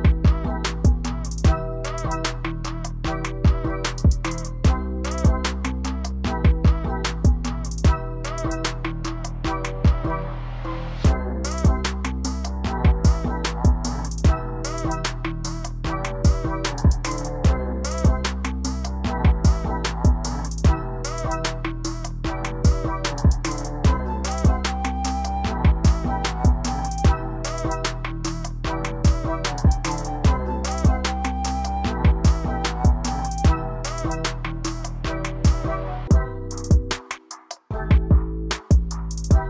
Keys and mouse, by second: 4.1-4.5 drag, 6.4-6.7 drag, 10.8 click, 13.9 click, 26.5-28.5 drag, 29.0-31.9 drag, 35.3-39.2 drag.